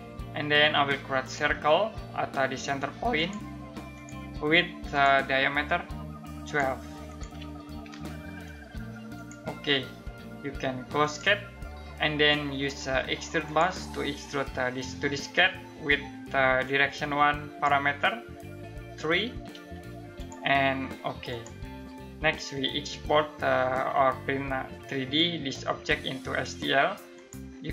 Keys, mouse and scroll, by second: 7.0-7.9 typing, 8.7 click, 16.2 click, 19.1 3, 19.7 click, 26.7 click.